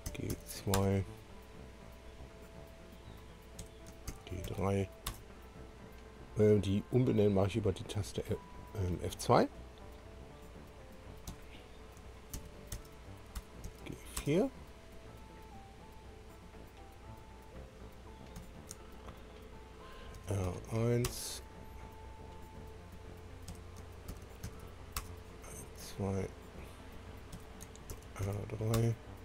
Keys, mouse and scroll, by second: 0.1 shift+g, 0.4 shift+2, 1.3 Return, 2.1 click, 3.6 F2, 4.5 shift+g, 5.0 3, 5.2 Return, 7.9 click, 11.3 F2, 12.3 shift+g, 13.4 BackSpace, 14.2 Return, 14.2 4, 16.6 click, 18.4 F2, 20.2 shift+r, 21.1 Return, 22.2 click, 23.5 F2, 24.1 r, 25.0 2, 25.1 Return, 26.1 click, 27.3 F2, 27.9 shift+r, 28.7 3, 28.8 Return.